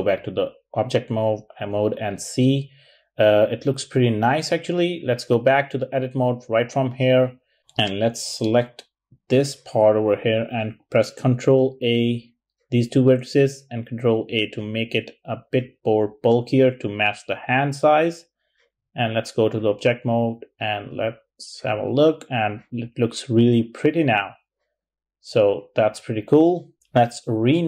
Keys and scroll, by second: 11.3 super+a.